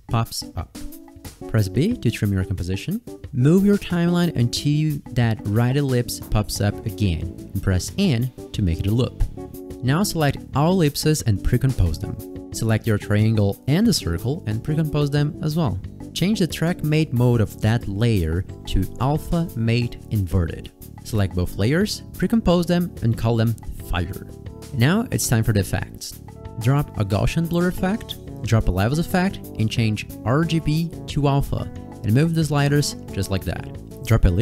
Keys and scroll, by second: 1.3 b, 6.7 n, 7.6 space, 13.1-13.9 typing, 14.0 Caps_Lock, 16.0 Caps_Lock, 23.5 Caps_Lock, 23.6-24.8 typing.